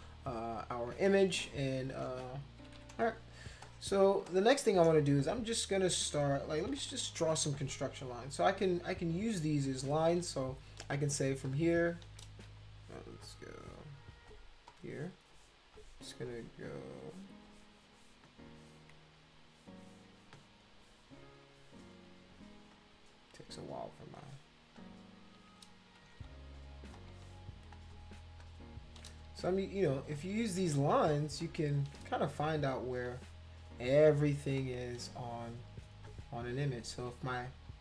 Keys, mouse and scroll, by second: 1.3 space, 1.4 click, 2.6 ctrl+-, 2.7 ctrl+-, 3.0 space, 3.6 click, 4.3 click, 6.7 [, 6.9 [, 9.6 click, 11.4 ctrl+shift+click, 14.7 click, 22.7 click, 24.0 click, 24.8 shift+click, 26.0 ctrl+z, 26.9 click, 28.4 shift+click, 30.1 click, 31.4 shift+click, 32.8 click, 34.6 shift+click, 37.7 click.